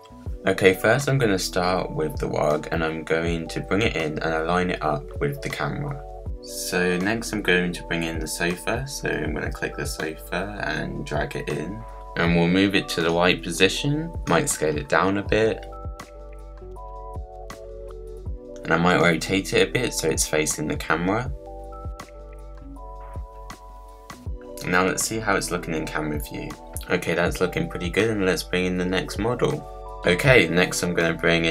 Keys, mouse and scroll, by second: 0.3 click, 0.4 middle click, 1.1 click, 1.4-1.8 scroll up 5, 1.8 middle click, 1.9 click, 2.7 click, 3.4 click, 4.0 middle click, 4.5 click, 4.9 click, 5.0-6.2 middle drag, 6.8-8.5 middle drag, 8.5 click, 9.0 middle click, 10.0 click, 11.9 click, 13.3 click, 13.8-15.1 scroll up 7, 15.1 s, 16.2 click, 17.3 click, 18.4 r, 22.6 click, 23.1 click, 23.6 scroll down 2, 23.9 middle click, 24.3 click, 25.7 click, 30.9 click.